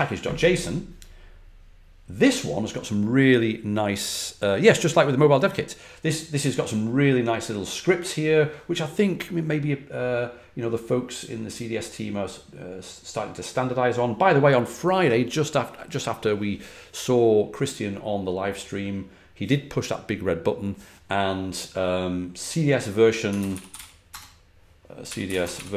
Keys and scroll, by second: 23.2-25.7 typing.